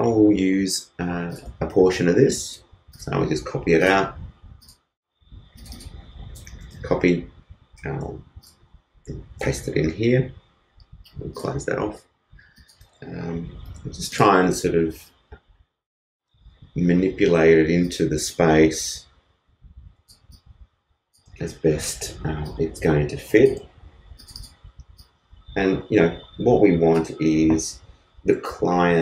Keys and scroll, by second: 6.6 super+c, 9.4 super+v, 13.7 super+t.